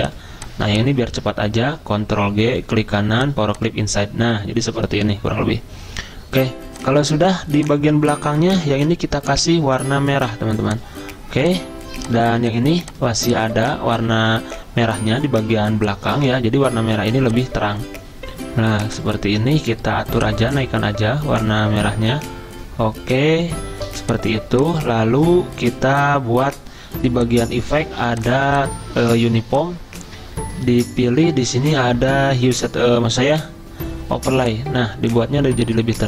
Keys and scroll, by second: 1.1 ctrl+z, 2.0 ctrl+g, 8.5 ctrl+z.